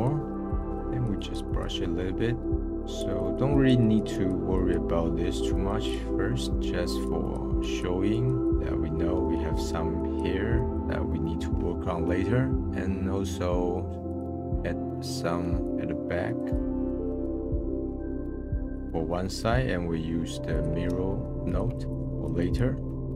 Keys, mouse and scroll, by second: 1.8 middle click, 2.6 scroll down 1, 2.8-5.0 drag, 5.0 middle click, 5.5-6.0 drag, 6.0 middle click, 6.6-8.5 drag, 10.0-10.7 drag, 10.7 middle click, 17.9 middle click, 18.0-18.9 drag, 18.9 middle click, 20.5-21.5 drag, 21.7-22.8 drag.